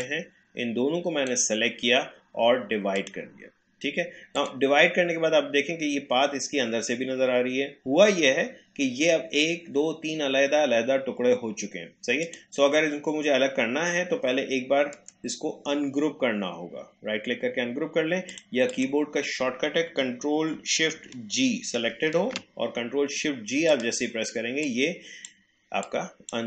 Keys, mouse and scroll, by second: 12.2 click, 15.0 right click, 18.3 click, 21.9 ctrl+shift+g, 23.7-26.4 drag.